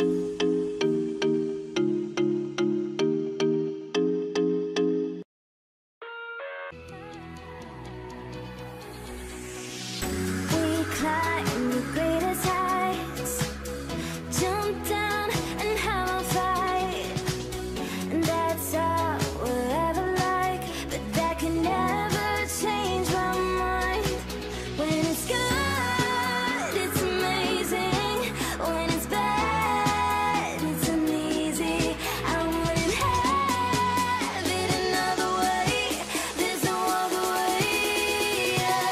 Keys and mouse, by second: 0.2 ctrl+z, 0.6-1.8 shift+drag, 1.9-3.4 middle drag, 3.7-4.8 middle drag, 4.8 g, 7.4-10.4 middle drag, 10.4 click, 11.7-13.5 middle drag, 14.6-18.8 shift+middle drag, 19.7-27.7 middle drag, 27.7 alt+a, 27.9-29.1 middle drag, 29.3-37.1 middle drag, 37.2-38.3 middle drag.